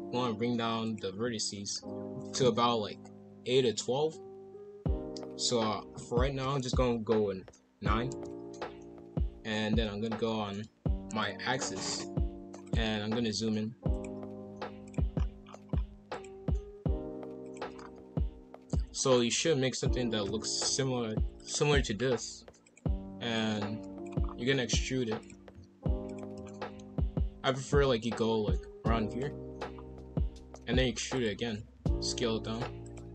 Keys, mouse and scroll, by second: 9.4 KP_5, 9.5 KP_1, 11.9-13.1 drag, 13.1 s, 14.3 s, 15.1-16.1 scroll up 10, 16.1 alt+click, 16.8 s, 17.7 scroll down 1, 18.0-18.5 scroll up 2, 18.6 s, 20.6 s, 22.6 click, 24.2 scroll down 2, 24.4 e, 25.5 s, 26.4 shift+middle click, 26.8-27.2 scroll up 1, 27.7 g, 29.7-30.2 scroll down 1, 30.2 e, 31.5 s.